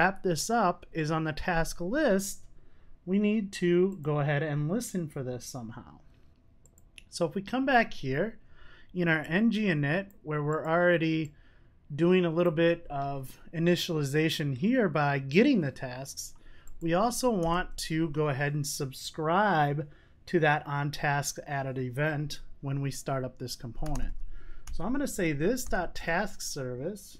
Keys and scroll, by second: 17.0 Tab, 26.0 Return.